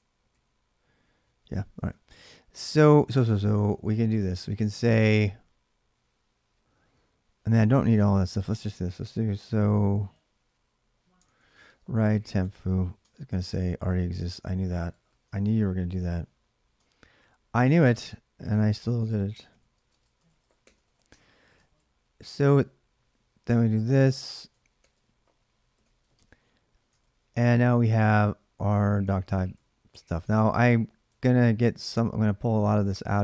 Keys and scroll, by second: 0.1 ctrl+a, 0.1 2, 1.6 ctrl+[, 2.0 ctrl+j, 2.0 :, 2.6 ctrl+[, 2.7 ctrl+j, 2.8 k, 3.0 k, 4.4 k, 5.5-6.4 typing, 7.7-8.8 typing, 9.7 ctrl+[, 9.7 ctrl+j, 9.8-12.4 typing, 12.8 Return, 13.7 ctrl+[, 13.8-15.4 typing, 15.2 ctrl+[, 16.6 Return, 17.6-20.6 typing, 20.9 Return, 21.5 ctrl+a, 21.6 ctrl+a, 22.1-27.4 typing, 25.9 Return, 27.6 ctrl+[, 27.7 ctrl+j, 29.6-33.2 typing.